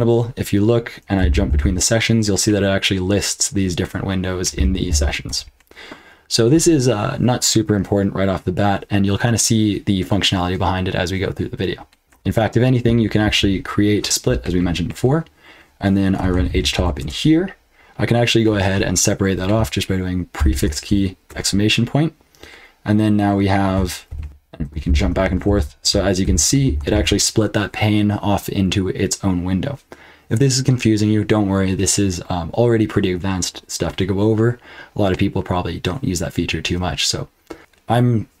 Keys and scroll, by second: 0.9-2.0 typing, 4.5 k, 4.9 j, 5.2 Return, 12.0 ctrl+d, 12.0 q, 14.0 ctrl+b, 14.0 ", 16.0-17.2 typing, 20.3 ctrl+b, 21.3 shift+1, 24.1 ctrl+t, 24.2 ctrl+b, 24.2-26.9 typing, 24.5 ctrl+b, 25.2 ctrl+b, 25.8 ctrl+b, 26.6 ctrl+b.